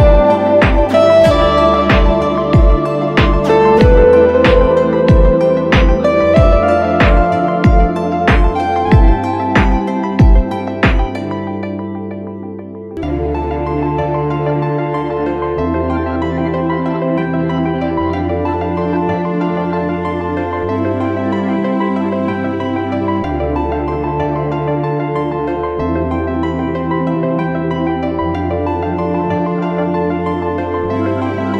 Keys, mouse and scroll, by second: 5.5 typing, 9.1-12.2 scroll down 1, 13.5-14.0 typing, 22.4 ctrl+t, 26.4 Return.